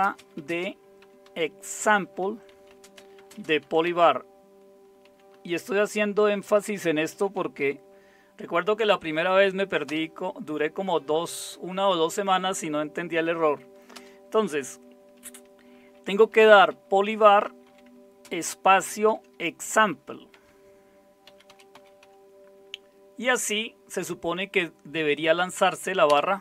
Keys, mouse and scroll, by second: 0.0-8.0 typing, 9.8 typing, 13.9 Return, 16.1-22.5 typing, 26.0 Return.